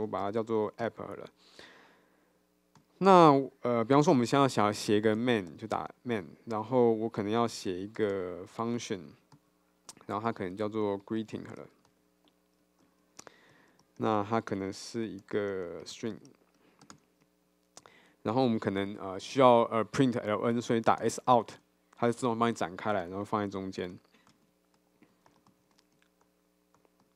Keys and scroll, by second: 5.9 Tab, 17.1 ctrl+shift+super+Return, 21.7 Tab.